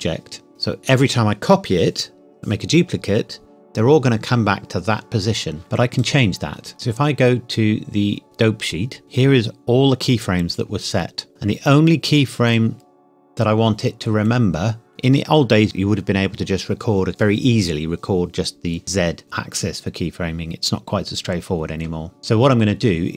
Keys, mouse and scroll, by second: 5.6 ctrl+z, 6.0 click, 8.2 click, 11.3-12.4 scroll up 2.